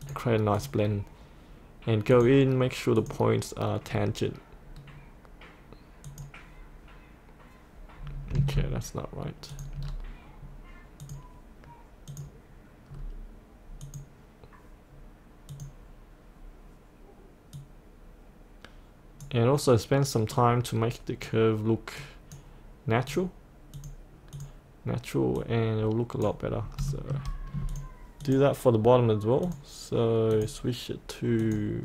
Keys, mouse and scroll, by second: 3.9-6.1 scroll down 1, 6.1 click, 9.5 click, 9.9-11.0 scroll down 1, 11.0 click, 12.9-13.9 scroll down 1, 13.9-26.4 drag, 26.4-26.8 scroll up 1, 27.0 shift+middle click, 27.7 click, 29.8 click.